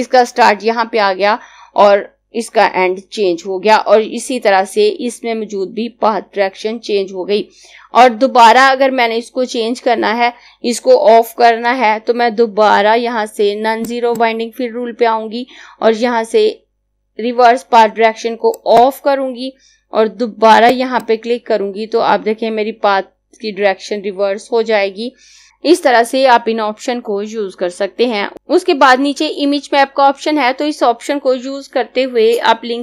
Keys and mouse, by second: 13.1 click, 17.6 click, 28.3 click.